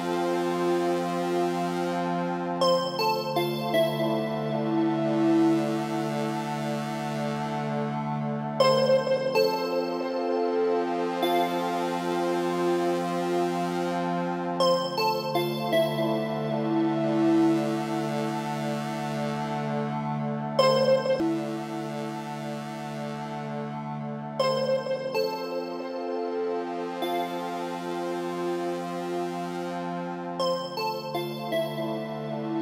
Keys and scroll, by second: 5.9 Right, 17.6 ctrl+t, 25.8 Return.